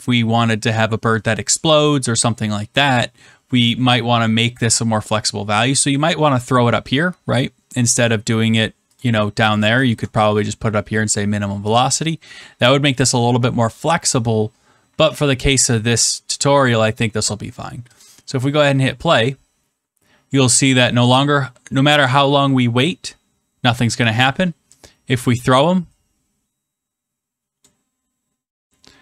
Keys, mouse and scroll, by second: 5.8 middle click, 9.0 click, 9.5 click, 9.9 Return, 11.5 middle click, 13.0 middle click, 17.9 click, 27.5 click.